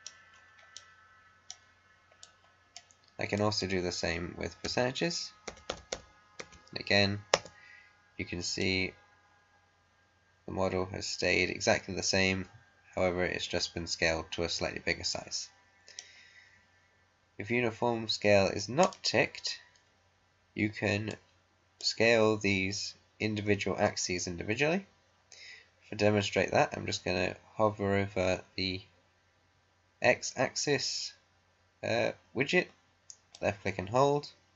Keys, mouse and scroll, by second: 0.3-0.6 scroll up 1, 0.9-2.1 right drag, 2.1 click, 4.6-6.3 typing, 7.5 Return, 8.5-16.3 right drag, 9.3 right drag, 10.7-12.0 right drag, 16.3 scroll down 1, 18.7-24.3 drag, 33.3-34.5 drag.